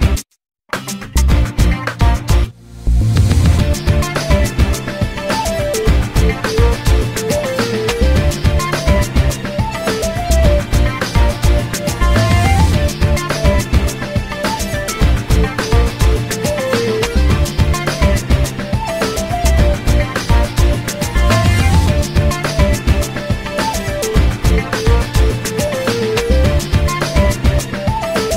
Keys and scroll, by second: 1.9 1, 6.9 l, 15.0 e, 19.2 p.